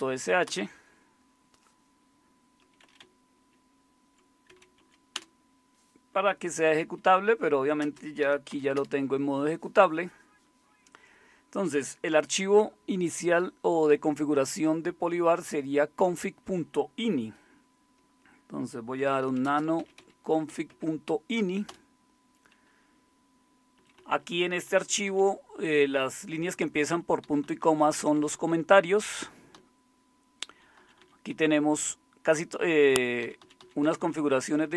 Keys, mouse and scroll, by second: 0.4 Return, 2.8 Up, 3.0 Left, 3.6 Left, 3.8-4.5 Left, 4.5-5.3 typing, 6.5-8.5 typing, 8.7 Return, 18.7-21.0 typing, 21.7 Return, 23.7 Down, 23.9 Down, 24.1 Down, 24.3 Down, 24.5 Down, 24.7 Down, 24.9 Down, 27.4 Down, 27.6 Down, 27.8 Down, 28.3 Down, 28.7 Down, 29.1 Up, 29.5-30.4 Down, 29.9-30.9 typing, 31.0 Down, 31.0 Down, 31.3-32.3 Up, 32.6 Up, 33.2 Down, 33.4 Down, 33.6 Down, 33.8 Down, 34.0 Down, 34.2 Down, 34.4 Down.